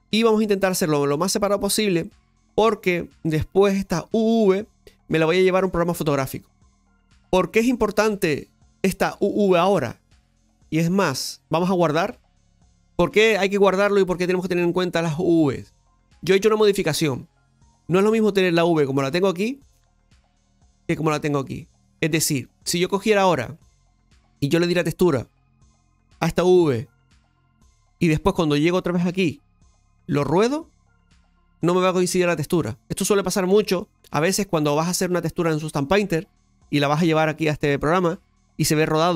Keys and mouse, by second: 0.7-1.9 drag, 2.3 right click, 3.7 click, 4.9 right click, 5.6 click, 12.1 click, 20.3-24.5 drag, 30.1 click.